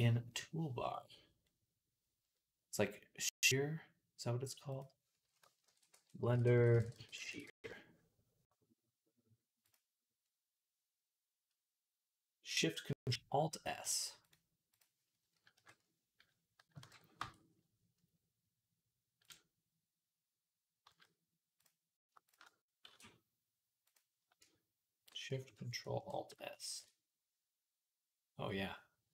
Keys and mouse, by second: 14.6 click, 15.4-25.7 middle drag, 15.4 KP_3, 16.6 ctrl+KP_1, 17.0 Tab, 19.1 click, 20.7 z, 22.1 alt+shift+click, 22.7 e, 26.2 ctrl+alt+shift+s.